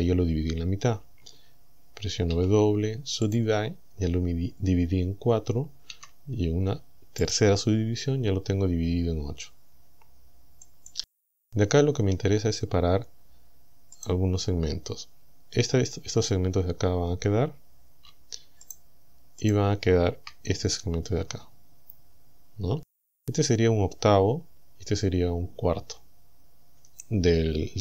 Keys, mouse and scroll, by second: 2.3 w, 3.3 click, 5.9 w, 7.3 click, 10.7 click, 12.3-12.7 scroll up 1, 14.0 right click, 18.7 shift+right click, 19.5 shift+right click.